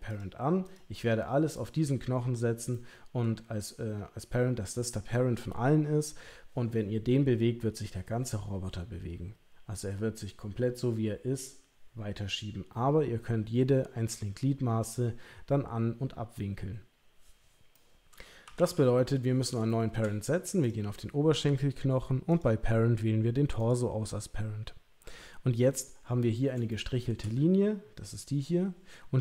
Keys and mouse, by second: 0.1 click, 1.5 click, 2.7 middle click, 17.8 middle click, 18.4 KP_3, 18.5 KP_1, 19.7 shift+middle click, 20.6 click, 22.4-23.7 drag, 26.1 middle click, 26.7 shift+middle click.